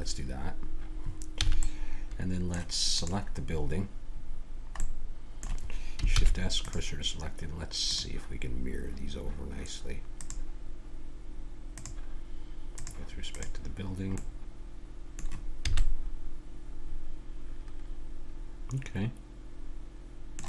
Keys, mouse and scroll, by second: 0.5-1.9 middle drag, 1.3 a, 2.9-4.8 drag, 6.1 shift+s, 7.9-9.7 drag, 10.2-12.0 drag, 12.8-14.2 drag, 14.2-15.6 middle drag, 15.7 a, 16.0-17.2 middle drag, 17.6 middle click.